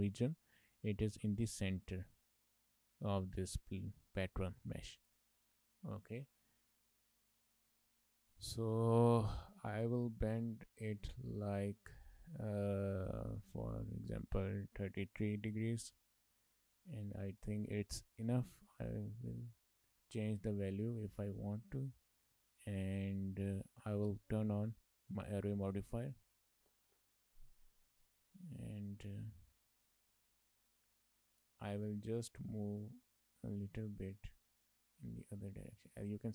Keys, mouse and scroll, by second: 0.1 shift+middle click, 0.4 middle click, 0.8 scroll up 2, 1.1 middle click, 2.4 middle click, 3.6 middle click, 5.2 shift+middle click, 5.5 middle click, 7.9 middle click, 8.2 shift+middle click, 8.6 middle click, 9.4 middle click, 11.4 click, 12.7 click, 14.3 click, 15.4 KP_3, 18.9 Tab, 20.0 shift+middle click, 20.3 middle click, 21.1 shift+middle click, 21.6 middle click, 22.2 scroll down 2, 22.4 shift+middle click, 22.6 middle click, 24.5 click, 25.8 click, 28.3 middle click, 28.6 shift+middle click, 29.0 middle click, 29.7 Tab, 31.0 middle click, 31.7 shift+middle click, 31.8 middle click, 32.9 click, 35.9 shift+middle click, 36.0 middle click.